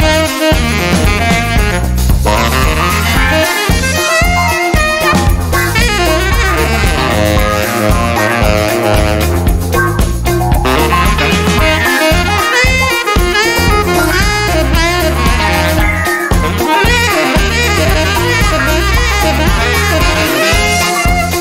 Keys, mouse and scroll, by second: 0.0 click, 1.6 click, 4.8 click, 6.6 click, 7.6 click, 9.2 0, 9.6 click, 10.1 0, 10.7 click, 11.5 0, 13.0 click, 14.6 click, 15.2 0, 15.8 click, 16.2 0, 17.2 click, 17.6 0, 18.9 click, 20.0 click.